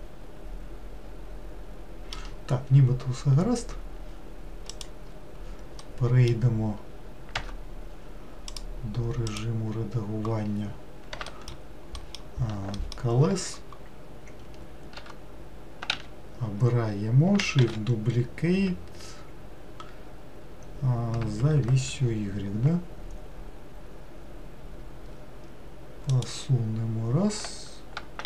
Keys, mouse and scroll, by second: 0.0-2.8 middle drag, 2.8-4.9 scroll down 1, 4.9 click, 6.0-7.5 middle drag, 7.5 Tab, 8.7 click, 9.5 click, 11.5 alt+middle click, 12.9 alt+middle click, 15.1 Tab, 16.0 a, 17.8 shift+d.